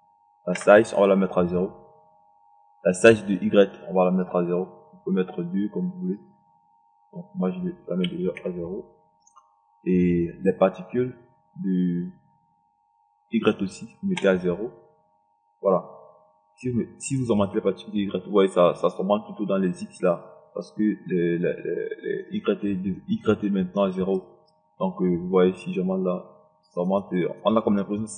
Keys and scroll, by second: 0.9 KP_0, 8.7 0, 9.1 KP_0, 14.5 KP_0.